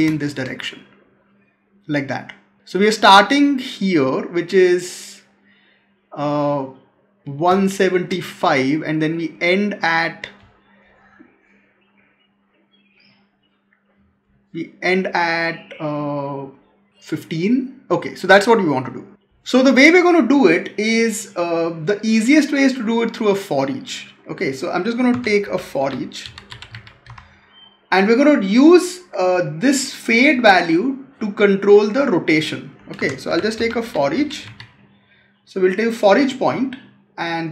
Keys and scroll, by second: 7.4 space, 25.0 Tab, 32.9 Tab, 33.9 Tab.